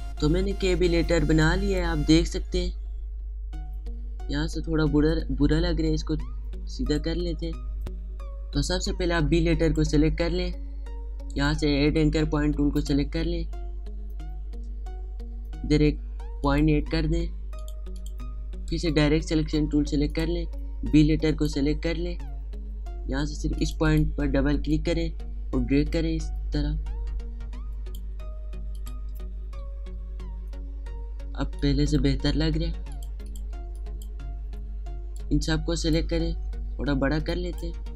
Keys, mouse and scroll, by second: 0.0 space, 0.2 click, 0.5 space, 1.9 click, 4.3 alt+scroll up 1, 4.6 alt+scroll down 1, 5.2-6.2 alt+scroll up 1, 7.2 click, 9.6 click, 11.3 right click, 12.7 click, 16.4 click, 18.6 right click, 20.1 click, 21.2 ctrl+click, 24.9-28.7 drag, 29.7 alt+scroll down 2, 29.8-30.4 alt+scroll up 2, 30.6 alt+scroll down 1, 31.4 space, 31.6 click, 31.9 space, 32.9 click, 33.6 space, 33.7 click, 34.1 space, 35.1-36.6 drag, 36.6 alt+scroll down 1, 37.2 space, 37.2 click.